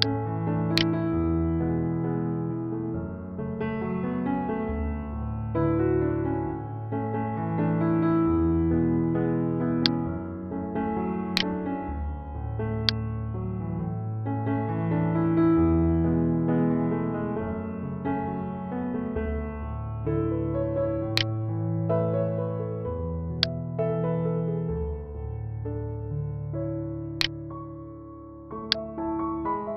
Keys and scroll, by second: 1.4 ctrl+z, 5.5 ctrl+0, 11.7 ctrl+z.